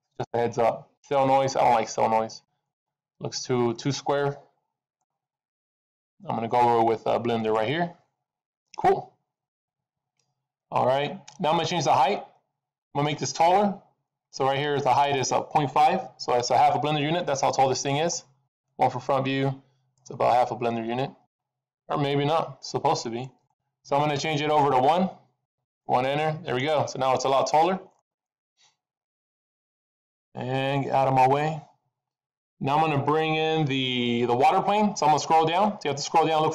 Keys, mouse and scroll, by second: 1.8 middle click, 3.0-3.6 scroll up 4, 3.6 middle click, 5.8 click, 8.2-8.8 scroll down 1, 8.8 middle click, 8.8-9.1 scroll down 2, 17.0 middle click, 18.4 KP_1, 19.8-21.0 scroll down 8, 21.2 middle click, 22.2 KP_1, 22.9 middle click, 23.3-24.5 scroll up 4, 24.5 click, 26.4 middle click, 27.8-28.6 scroll up 1, 28.6-29.4 scroll up 2, 35.2-36.4 scroll down 5, 36.4-36.5 scroll down 2.